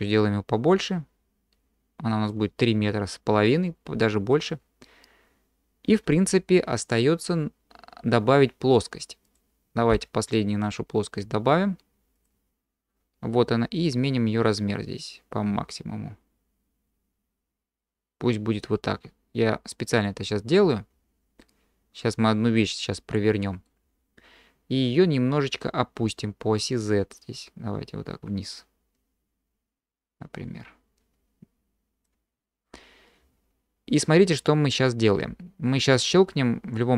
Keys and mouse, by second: 0.3-2.3 drag, 4.5 middle click, 4.6-5.1 drag, 5.1-6.0 middle drag, 9.9 q, 13.8-19.7 drag, 21.4-23.7 middle drag, 26.7-32.1 drag.